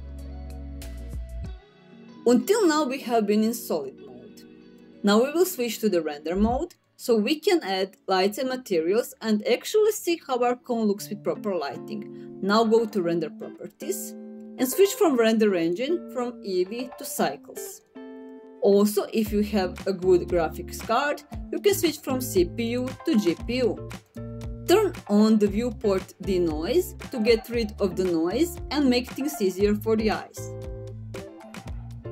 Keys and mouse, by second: 6.3 click, 12.5 click, 15.3-17.4 drag, 22.2-23.8 drag.